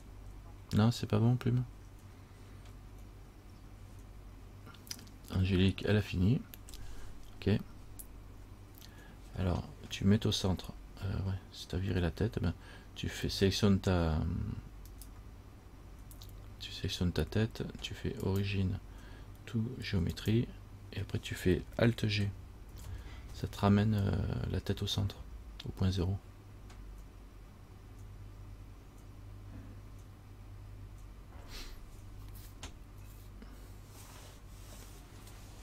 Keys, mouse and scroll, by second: 15.1 right click, 18.5 click, 22.9 alt+g.